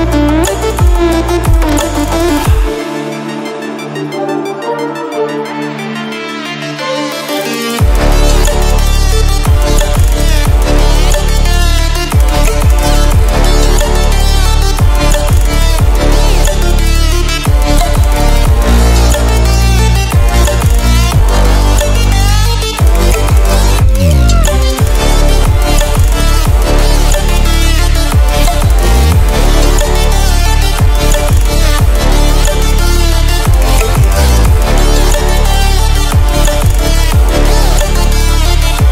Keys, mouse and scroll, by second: 0.3-8.2 drag, 8.2 ctrl+w, 10.8 ctrl+w, 12.9-13.9 drag, 13.9-14.3 ctrl+alt+scroll up 2, 14.7 click, 15.6 Down, 18.3 click, 24.0 Up, 26.0 click, 32.1 click, 33.8 ctrl+alt+scroll down 1, 35.9-38.9 drag.